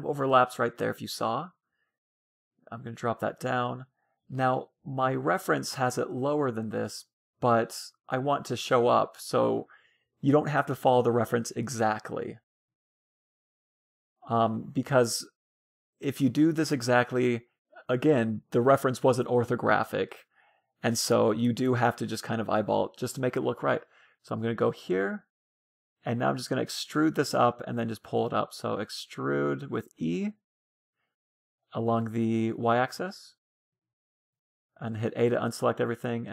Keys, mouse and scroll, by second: 0.3 a, 0.6 b, 2.0-4.0 drag, 3.3 a, 4.0 b, 4.7-6.2 middle drag, 6.2-7.9 drag, 7.8 a, 7.9 a, 9.2-11.0 drag, 10.8-12.6 middle drag, 19.4-21.4 middle drag, 20.7 a, 21.3 b, 22.2-24.0 drag, 24.1-26.9 middle drag, 26.8 a, 27.1 b, 30.1 e, 34.3 a, 34.6 c, 35.1-36.3 right drag, 35.7-36.3 drag.